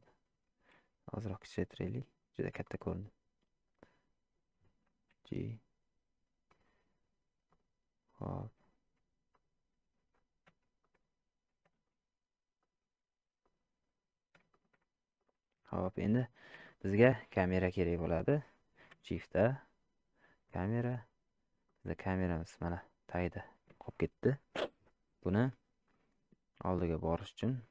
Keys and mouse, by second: 3.8-4.4 drag, 8.4 click, 9.3 click, 11.8 ctrl+z, 13.5 click, 14.5 shift+middle click, 16.1 middle click, 16.6 shift+middle click, 19.2 shift+a, 21.8-23.4 middle drag, 24.6-25.5 middle drag, 26.1-27.7 middle drag.